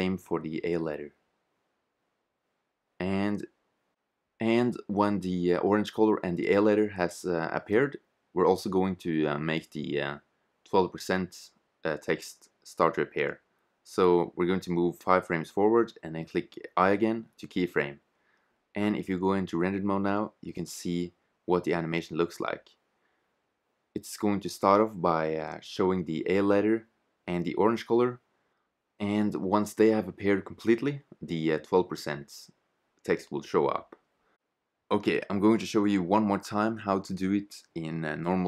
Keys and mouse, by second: 0.2 right click, 0.9-3.4 drag, 1.2 i, 6.7 i, 8.6-10.6 drag, 14.2-16.1 drag, 16.5 i, 20.9 shift+z, 24.0-25.8 drag.